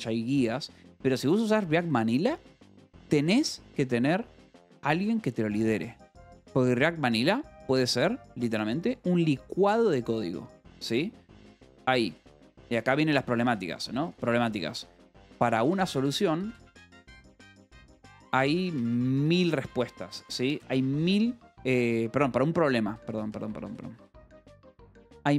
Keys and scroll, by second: 3.8 shift+v, 4.7 Escape, 6.0 shift+v, 7.8 Escape, 11.9-21.8 typing, 23.0-25.3 typing.